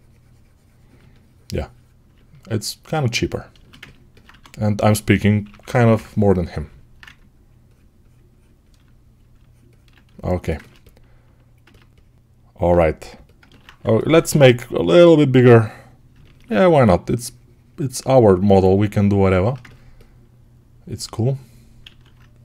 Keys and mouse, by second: 4.1-13.0 right drag, 4.1 1, 5.3 [, 14.0 6, 19.4-22.4 ctrl+alt+drag, 21.7 alt+q.